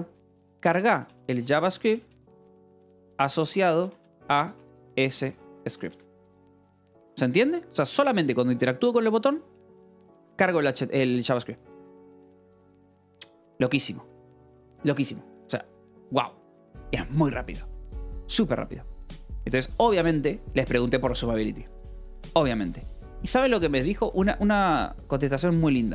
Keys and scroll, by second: 0.0-6.0 typing, 18.5-21.3 typing, 20.1 Escape, 21.7 Escape, 22.9 l, 23.5 v, 24.1 e, 24.8 c.